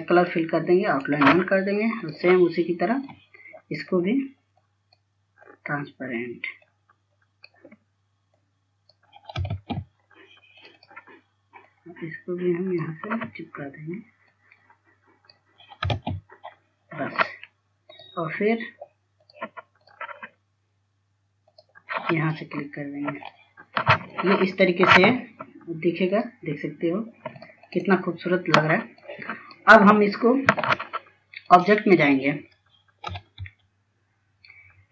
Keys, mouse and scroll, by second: 0.8 click, 1.5 right click, 2.6-10.1 drag, 10.3 ctrl+space, 10.7 scroll up 1, 11.4-16.7 drag, 16.8 ctrl+space, 17.5 scroll down 1, 18.7 click, 23.7-24.2 scroll down 1, 24.2-28.0 drag, 34.5 ctrl+s.